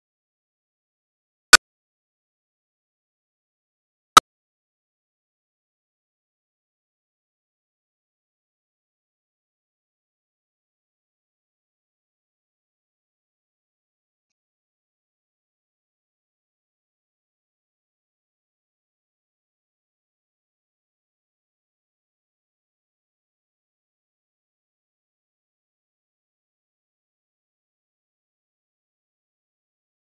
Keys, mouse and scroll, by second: 0.3 shift+a, 1.9 click, 2.4 scroll up 6, 2.5 shift+middle click, 3.0 click, 4.1 scroll down 2, 4.2 scroll up 1, 4.5 shift+middle drag, 4.7 scroll down 1, 4.9 shift+middle click, 5.1-5.9 scroll up 3, 6.0-8.2 drag, 8.2 scroll up 6, 8.4-9.2 drag, 9.4 scroll down 3, 9.6 click, 10.0 shift+middle drag, 10.1 click, 10.9 shift+middle click, 12.0 shift+middle click, 13.1 click, 13.1 scroll down 2, 13.4 shift+l, 13.9 scroll down 1, 14.1 shift+click, 14.4 shift+l, 14.7-15.3 shift+drag, 15.3-15.9 shift+middle drag, 15.9 ctrl+j, 16.2 KP_Decimal, 16.3 middle click, 16.4 Tab, 16.5 scroll up 1, 16.7 alt+j, 17.1 Tab, 17.2 shift+click, 17.4 ctrl+c, 17.8 click, 18.0 scroll up 1, 18.3 click, 18.7-19.8 scroll down 6, 18.8 middle drag, 19.2 middle click, 19.3-19.7 shift+middle drag, 19.8-20.2 shift+middle drag, 20.2 KP_0, 20.7 KP_0, 20.9 scroll down 1, 21.0-21.3 shift+middle drag, 21.3 ctrl+b, 21.9 click, 22.1 scroll down 1, 22.2 middle click, 22.6 z, 24.2 z, 24.6 middle click, 25.0 scroll down 2, 25.2 shift+middle click, 25.6 ctrl+b, 26.1 z, 27.1 click, 28.7 click, 29.1 middle click, 29.3 click, 29.5 0, 29.6 middle click, 29.7-30.0 scroll up 4, 29.8 click, 29.9 shift+d.